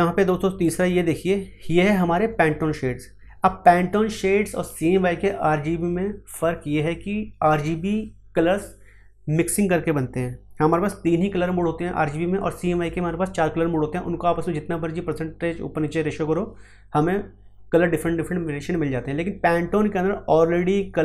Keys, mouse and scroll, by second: 1.1 click.